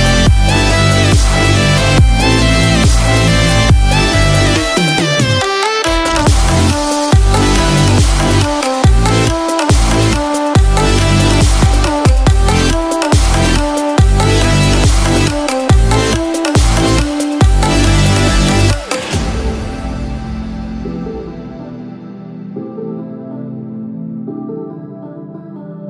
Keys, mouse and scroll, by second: 16.2 scroll.